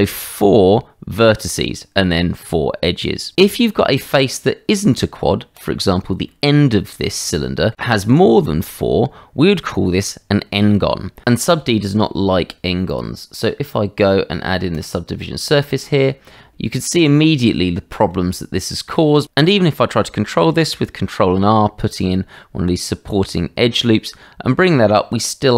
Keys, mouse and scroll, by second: 3.9 Tab, 5.6 click, 6.3 middle click, 7.3 shift+middle click, 17.1 middle click, 18.3 shift+middle click, 19.0 middle click, 20.6 ctrl+r.